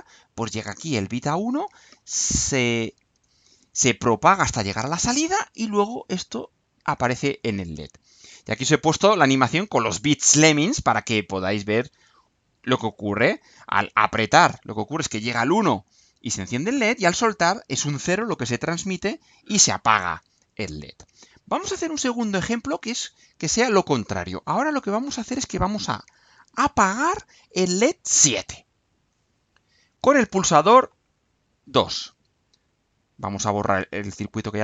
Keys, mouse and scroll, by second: 7.2-8.0 scroll down 4, 22.5 click, 34.0 click.